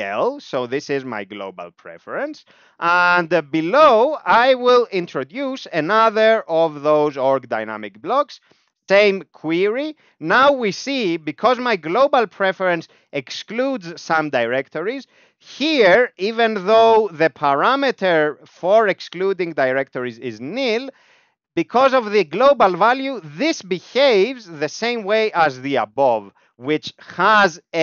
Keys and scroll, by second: 0.0-0.2 typing, 0.9 ctrl+e, 1.8 Down, 1.9 Down, 2.1 Down, 2.6 Return, 4.0 alt+x, 4.8 alt+p, 5.7 alt+x, 6.5 alt+p, 8.2 alt+x, 8.9 Down, 9.1 Down, 9.2 Down, 9.4 Down, 9.6 Down, 10.1 Up, 10.4 Up, 10.5 Up, 10.7 Up, 10.8 Up, 11.2 Up, 11.3 Up, 11.5 Up, 14.5 Down, 14.7 Down, 15.0 Down, 15.9 ctrl+s, 16.0-17.1 typing, 17.2 Right, 17.3 Right, 17.6 Right, 17.7 Right, 17.9 Right, 18.1 Right, 18.2 Right, 18.4 Right, 18.6 Right, 19.8 Left, 20.2 Right, 23.5 Down, 23.7 Down, 23.9 Down, 24.1 Down, 24.3 Up, 24.5-25.6 Up, 25.7 Up, 25.9 Up, 27.1 ctrl+l.